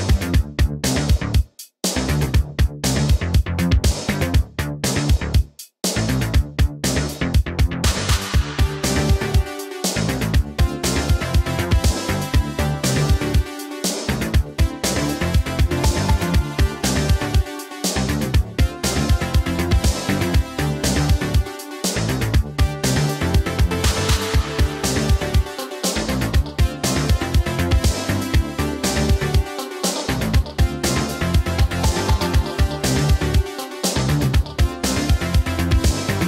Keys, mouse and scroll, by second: 1.1 click, 7.8 click, 15.2 BackSpace, 16.4 space, 17.3 BackSpace, 18.6 space, 21.1 Return, 23.0 click, 28.4 click, 32.9 BackSpace, 34.4 BackSpace, 34.9 space.